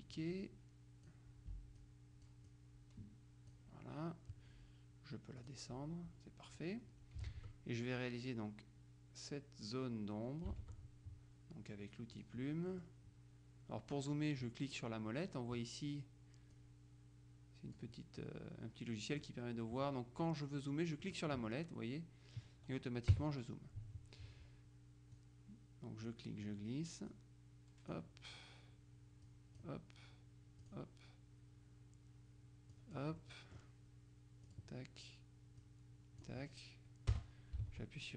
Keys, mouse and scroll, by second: 0.2-1.6 drag, 1.8-2.8 drag, 5.5 click, 7.5 alt+Tab, 10.7 alt+Tab, 12.3 click, 12.8 middle click, 16.6-18.4 drag, 21.1 click, 23.2 KP_Subtract, 25.2-26.6 drag, 27.2-28.5 drag, 29.3 click, 30.7 click, 32.8 click, 34.6 click, 35.7-36.8 drag, 37.2 Return.